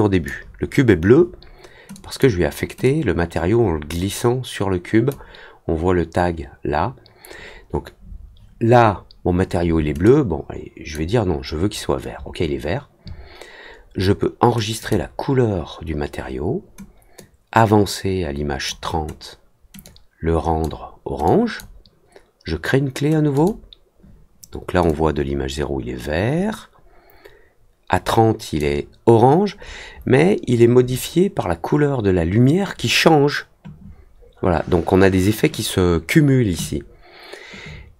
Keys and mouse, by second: 1.9 click, 2.8-5.0 drag, 10.0 click, 14.7 click, 17.1-18.6 drag, 19.8 click, 21.2 click, 23.3 click, 24.8-28.5 drag.